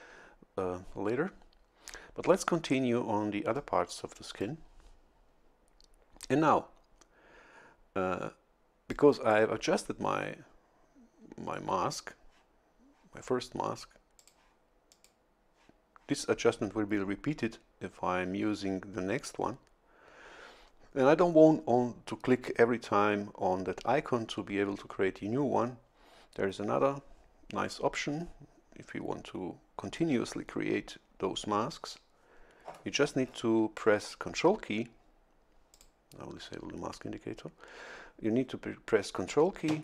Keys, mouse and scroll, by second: 3.5-4.6 drag, 8.9-10.4 drag, 14.2 click, 14.9 click, 35.7 click.